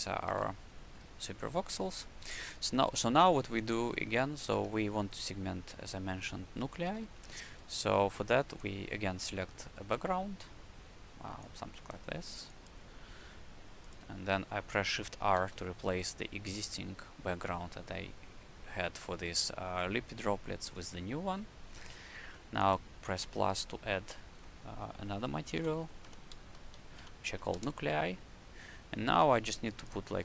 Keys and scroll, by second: 0.3 shift+c, 4.3 w, 6.8 q, 15.3 shift+r, 25.5-27.2 typing, 27.5 Return.